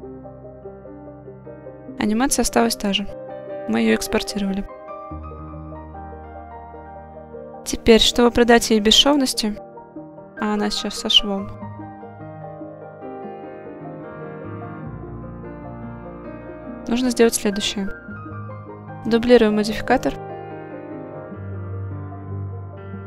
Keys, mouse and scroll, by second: 6.1 click, 6.8 click, 9.1 click, 10.5-11.7 drag, 13.6-14.7 drag, 16.3 click, 16.8 click, 19.1-20.7 drag.